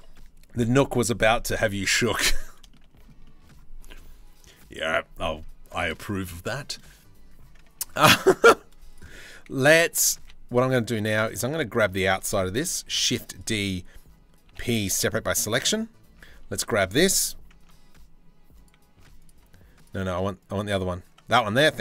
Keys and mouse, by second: 1.4 shift+middle click, 2.3-2.6 shift+middle drag, 2.8 click, 5.7 drag, 6.2-7.3 shift+middle drag, 7.3 Tab, 8.5-9.8 middle drag, 9.8 3, 12.4 shift+d, 14.0 p, 14.8 Tab, 15.1 click, 15.6 Tab, 16.1 a, 17.2 Tab, 18.6 z, 19.4 click, 20.9 Tab.